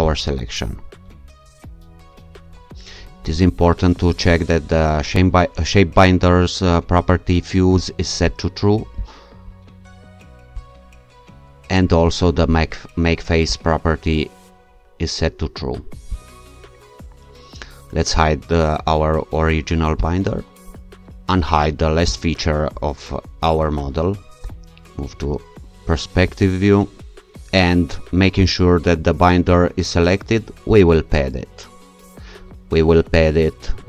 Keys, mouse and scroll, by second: 0.0 shift+click, 8.3 click, 10.6 click, 13.5 click, 16.1 click, 20.0 click, 22.1 shift+click, 24.4 0, 28.4 click, 30.7 click.